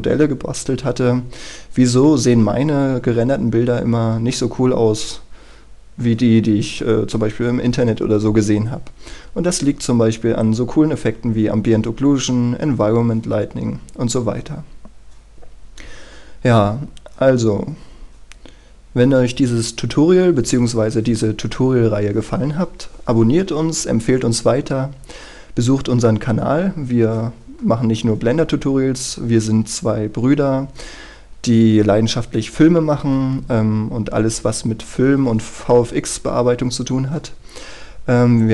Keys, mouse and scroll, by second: 10.6 click, 11.2-12.1 scroll down 1, 13.4-28.0 scroll up 1, 28.0-38.5 scroll down 1.